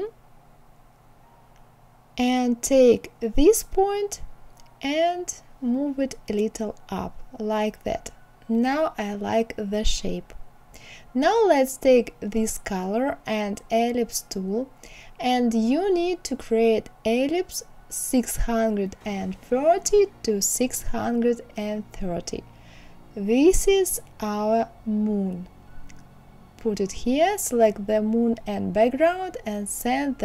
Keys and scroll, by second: 3.7 Up.